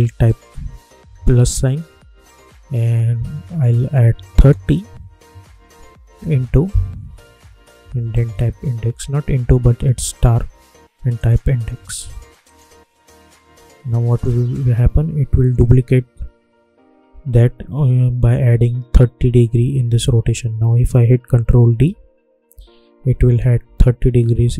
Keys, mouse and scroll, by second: 0.9 shift+=, 6.1 shift+8, 7.8-9.4 typing, 11.1 click, 20.5 ctrl+Num_Lock, 20.5 click, 21.2 ctrl+d.